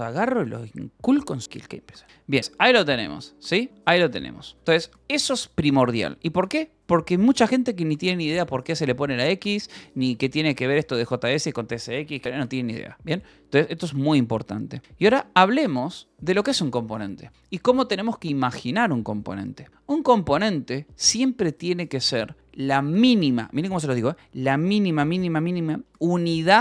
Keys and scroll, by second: 2.0-4.5 typing, 2.4 Return, 9.4 shift+;, 9.5 Return, 10.1 j, 11.1 k, 12.2 j, 13.2 k, 14.8 j, 15.6 shift+v, 15.8 Escape, 16.7 shift+v, 17.3 Escape, 17.6 :, 19.9 Return.